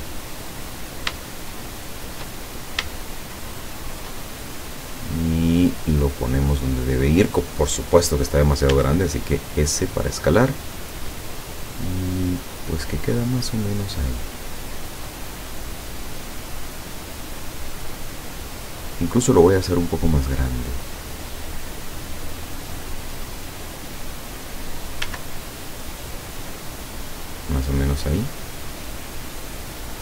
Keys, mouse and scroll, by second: 0.8-1.1 scroll up 1, 1.5 shift+middle click, 2.5-2.8 shift+scroll up 1, 3.0-4.2 shift+middle drag, 4.9-7.3 drag, 8.7 s, 13.7 click, 14.1 middle click, 14.3 scroll up 1, 16.1-19.1 drag, 19.9-21.5 drag, 21.6-23.3 middle drag, 25.1 s, 26.4 click, 27.0-28.0 drag, 29.1 click, 29.9-30.0 scroll down 4.